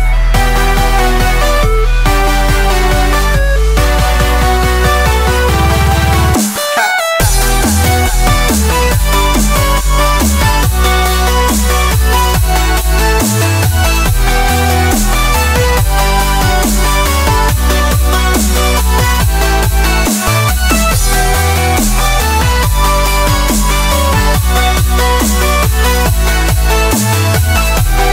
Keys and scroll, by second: 7.4 Tab, 8.0-8.5 typing, 10.6 Tab, 21.2 Tab, 21.6-23.5 typing, 25.8 space, 26.3 alt+super+space.